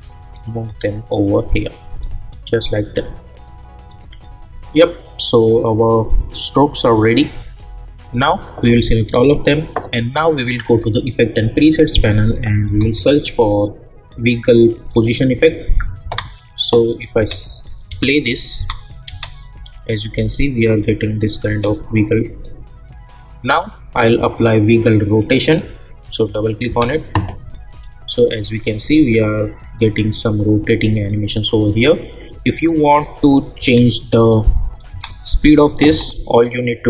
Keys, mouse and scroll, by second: 0.0 shift+click, 1.2-3.3 drag, 3.9 u, 5.4 click, 9.0 ctrl+a, 10.6 click, 12.1-13.3 typing, 14.9 click, 16.0 space, 21.5 space, 21.9-24.7 drag, 25.2 click, 26.7 space, 33.6 space, 34.3 click, 34.9 space.